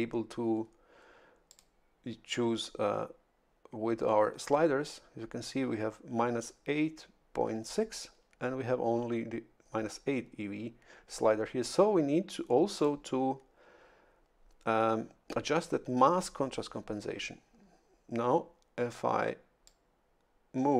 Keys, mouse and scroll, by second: 1.5 click, 12.7 click, 19.6-20.7 drag.